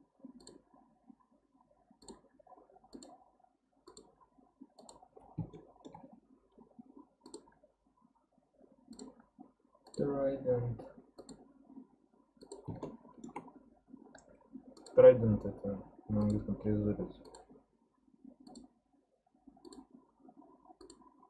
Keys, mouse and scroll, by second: 5.1-5.5 scroll down 1, 5.5 shift+middle click, 6.0-8.3 scroll up 4, 12.8-15.9 shift+middle drag.